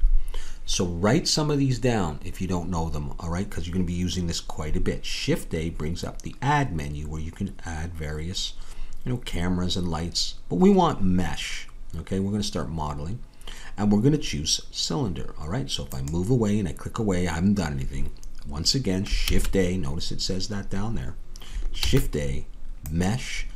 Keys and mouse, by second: 19.2 shift+a.